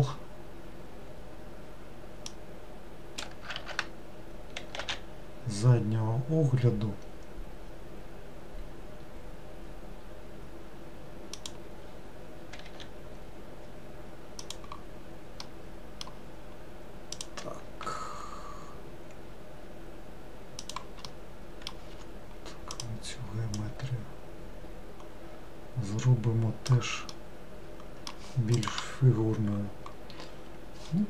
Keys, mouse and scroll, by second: 2.3 shift+click, 3.6 ctrl+z, 4.9 e, 12.8 e, 15.5-17.2 middle drag, 17.2 click, 17.9 e, 21.2 middle click, 22.0 2, 22.8 click, 23.6 click, 27.2-30.3 middle drag.